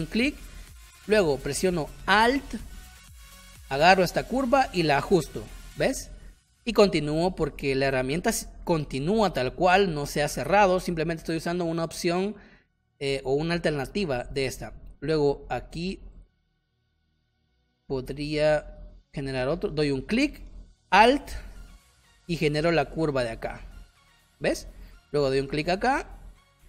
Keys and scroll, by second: 6.3 space, 24.6 space.